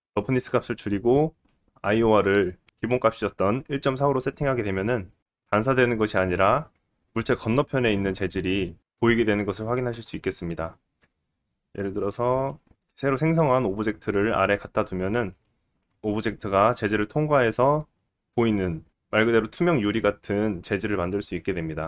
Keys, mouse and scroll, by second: 1.5-10.7 drag, 6.6 middle click, 10.7-14.2 middle drag, 10.7 scroll up 3, 10.7 g, 14.2 g, 15.5-15.9 middle drag, 15.9 click, 16.0-18.3 middle drag, 18.3 click, 18.5-20.8 middle drag, 21.3 middle click, 21.7 middle click.